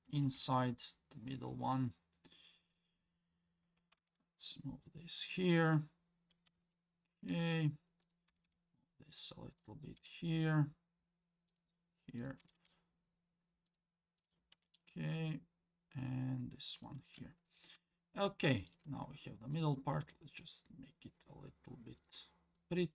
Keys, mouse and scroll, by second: 2.7 click, 4.0 g, 6.7 shift+middle click, 8.0 click, 8.3 g, 9.6 click, 10.0 g, 12.2 click, 12.4 g, 14.2 click, 14.5 g, 17.9 shift+middle click, 19.5 click, 20.0 g, 22.5 click.